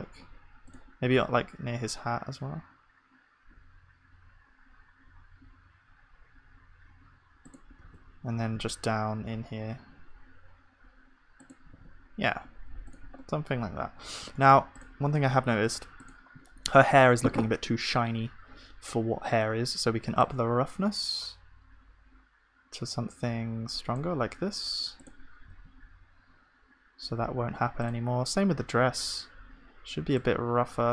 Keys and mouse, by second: 1.1 shift+d, 12.9-28.8 drag, 12.9 ctrl+s, 25.5 ctrl+s, 28.8-30.9 middle drag.